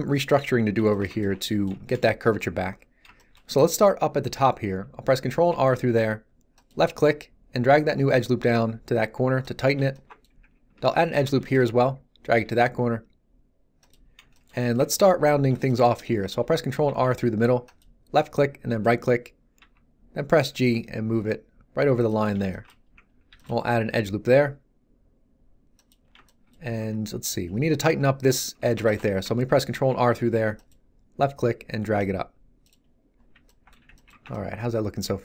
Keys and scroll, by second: 5.5 ctrl+r, 11.2 ctrl+r, 16.8 ctrl+r, 19.5 g, 23.2 ctrl+r, 23.8 g, 26.7 Tab, 29.7 ctrl+r, 33.7 z, 34.1 Tab.